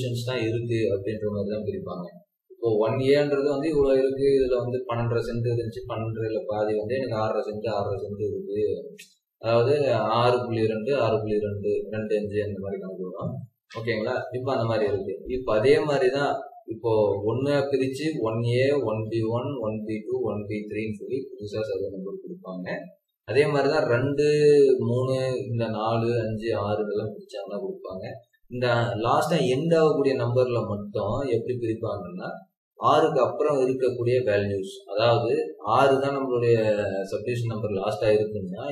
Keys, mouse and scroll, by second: 25.3-26.0 scroll down 1, 28.0-28.5 scroll up 1, 38.6 typing.